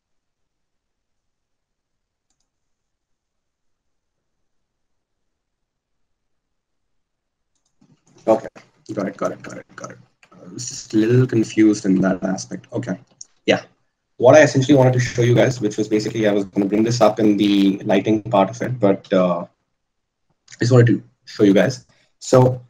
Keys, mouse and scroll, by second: 10.1 ctrl+z, 11.3-22.6 ctrl+z.